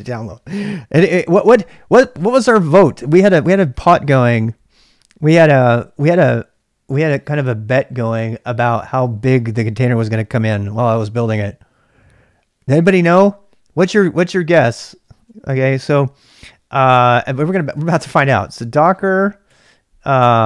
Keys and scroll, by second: 15.2-16.2 typing, 17.2-19.4 typing.